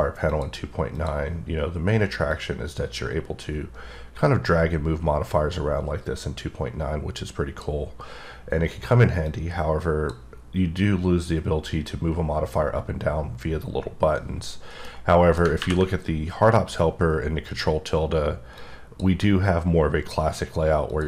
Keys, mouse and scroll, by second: 0.3 click, 1.0 click, 2.3 click, 9.3 click, 14.9 middle click, 17.5 click, 18.6 click, 20.9 click.